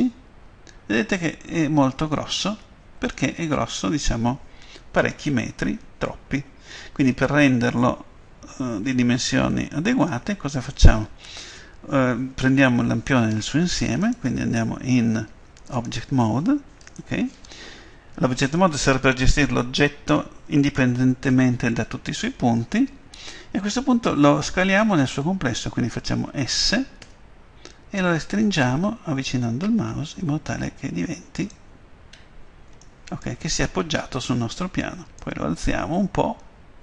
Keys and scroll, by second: 0.1 F12, 2.5 Escape, 27.0 s.